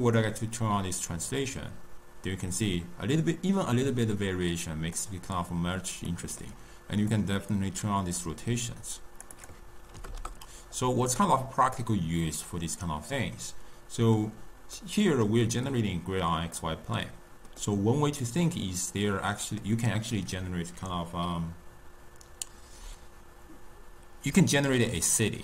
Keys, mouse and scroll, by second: 0.0-3.1 drag, 6.0-7.0 middle drag, 7.0-11.1 drag, 11.1-14.1 middle drag, 14.7-20.6 middle drag.